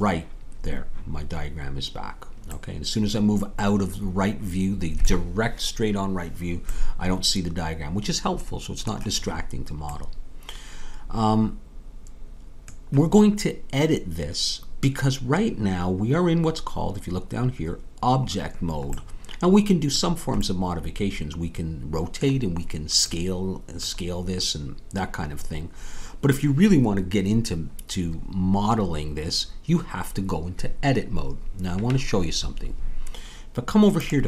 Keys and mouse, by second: 2.5-3.9 middle drag, 19.0-32.9 middle drag.